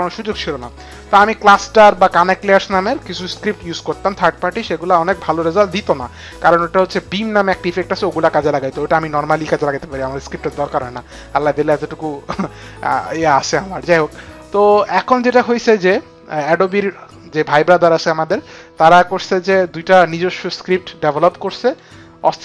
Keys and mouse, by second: 21.5 click.